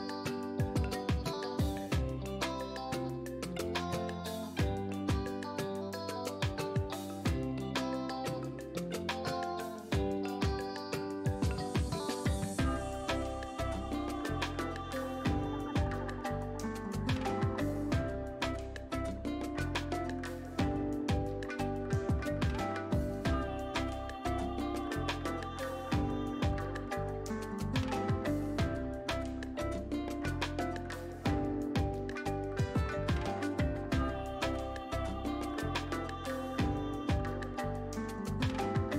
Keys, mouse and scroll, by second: 7.0 click, 16.5 click, 18.1 ctrl+a, 19.1 click, 20.2 ctrl+d, 21.5 Up, 24.7 Up, 34.4 click.